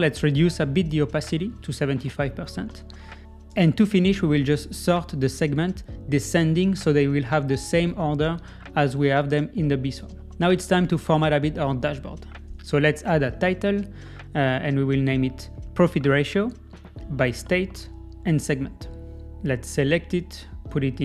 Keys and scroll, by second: 9.4 Escape.